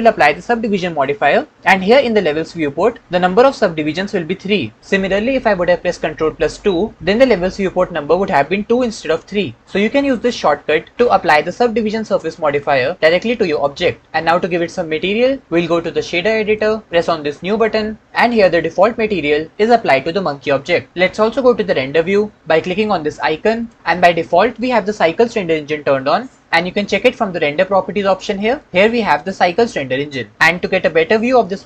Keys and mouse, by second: 28.4 click.